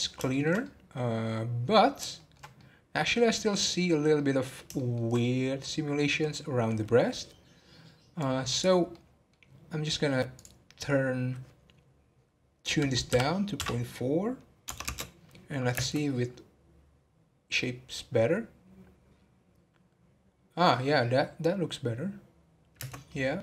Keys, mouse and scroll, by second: 0.0 scroll up 3, 0.3-3.4 shift+middle drag, 3.4-4.1 scroll up 1, 4.1-7.0 middle drag, 7.0-8.2 scroll down 6, 8.2 click, 8.9-9.5 middle drag, 9.5-10.3 scroll up 2, 10.3-13.5 drag, 15.8 space, 22.9 space, 23.0-23.4 middle drag.